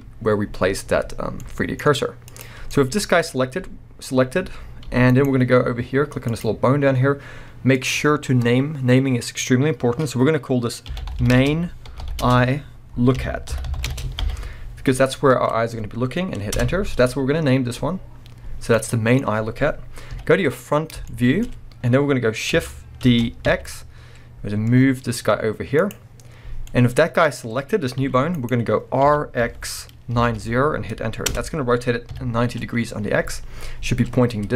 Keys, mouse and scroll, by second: 2.3 click, 2.7-5.2 middle drag, 4.9 g, 5.2 right click, 6.3 click, 7.7-18.7 drag, 13.7 o, 16.6 Return, 18.7-25.9 middle drag, 20.1 KP_1, 20.8 scroll up 2, 21.5 scroll up 1, 23.0 shift+d, 25.9 click, 26.7-28.5 middle drag, 27.4-28.0 scroll down 1, 28.0 g, 28.5 right click, 29.1 r, 31.4 Return, 32.1 KP_3, 33.0 scroll up 1.